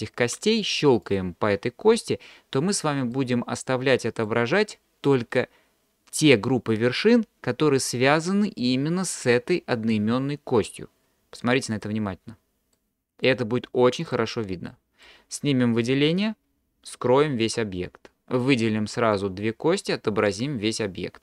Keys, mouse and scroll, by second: 1.0 click, 3.2-4.3 middle drag, 12.8-13.2 middle drag, 14.0 click, 14.7-15.0 middle drag, 18.5-19.2 drag.